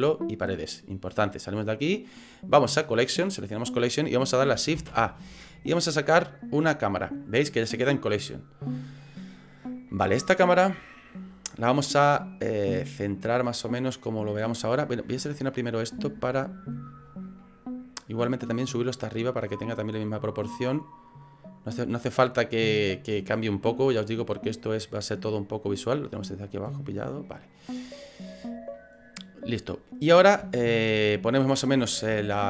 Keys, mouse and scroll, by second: 1.6 click, 2.8 click, 4.8 shift+a, 10.0 middle click, 10.2 middle click, 15.0 right click, 15.5 scroll up 3, 16.0 shift+middle click, 17.5 middle click, 18.7 click, 21.2 click, 22.9 click, 24.4 click, 25.8 click, 26.8 click, 28.5 right click, 28.8 middle click, 30.0 middle click, 30.5 shift+middle click, 31.2 middle click, 32.2 middle click.